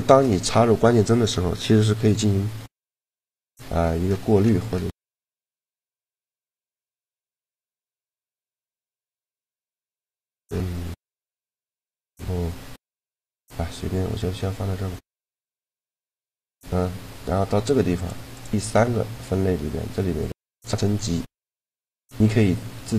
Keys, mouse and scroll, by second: 2.6-4.5 drag, 15.3-17.2 drag, 17.7-19.9 drag, 21.0-22.8 drag.